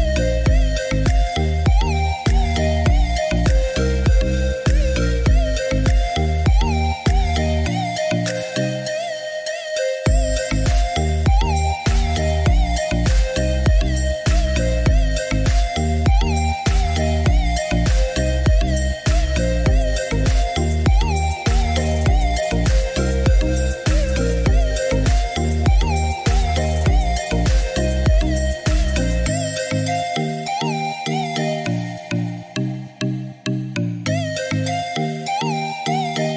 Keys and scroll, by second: 3.8 1, 4.2 7, 4.5 Return.